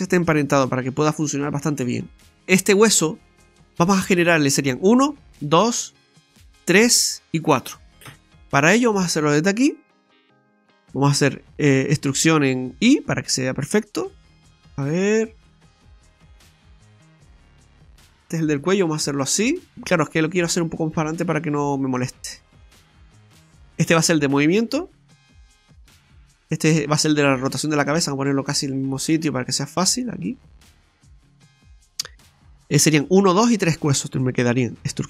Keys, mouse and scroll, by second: 2.0-2.3 scroll up 1, 3.2 middle click, 8.1 KP_3, 10.0 right click, 11.9 e, 19.7 right click, 20.7 click, 22.2 right click, 22.9 click, 24.9 click, 26.5 right click, 27.0 right click.